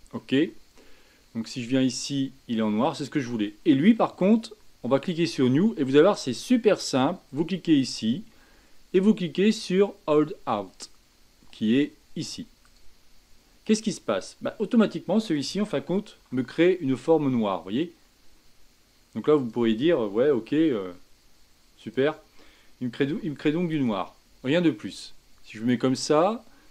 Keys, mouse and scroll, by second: 1.9 click, 2.8 click, 5.0 click, 7.3-10.3 drag, 16.1 g, 20.4 a, 21.8 click, 23.0 g, 25.6 click.